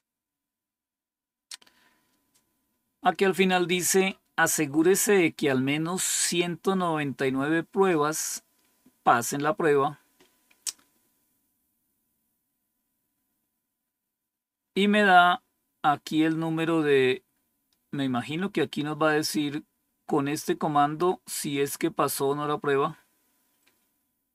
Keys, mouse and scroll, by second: 13.5 scroll down 1, 23.8 scroll down 2.